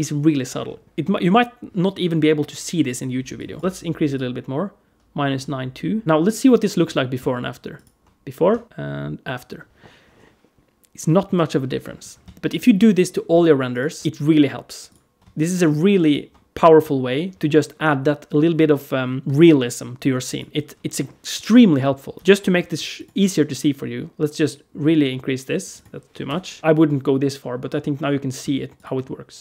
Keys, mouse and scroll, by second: 3.2 click, 3.6 click, 6.0 alt+middle click, 7.6 ctrl+shift+click, 8.6 ctrl+shift+click, 12.4 ctrl+shift+click, 13.8 ctrl+shift+click, 14.7 click, 15.2 click, 15.9 click, 20.1 click, 22.1 BackSpace, 25.5 click, 26.6 click, 28.6 ctrl+shift+click.